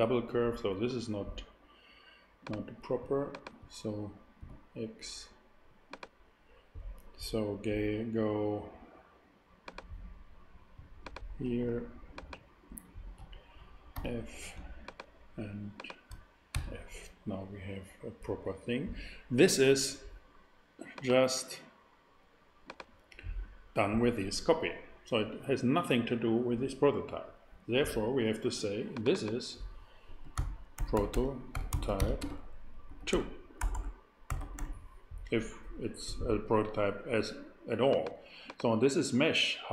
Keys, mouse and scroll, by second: 4.4 x, 9.6-10.8 drag, 13.9 shift+super+f, 14.5 super+f, 16.5 f, 16.5 f, 17.1 f, 20.9-22.4 drag, 30.2-34.5 typing.